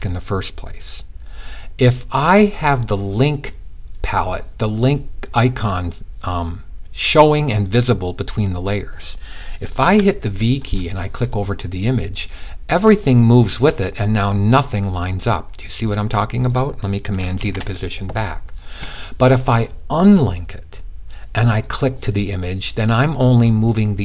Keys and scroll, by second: 9.2 v, 16.9 super+z.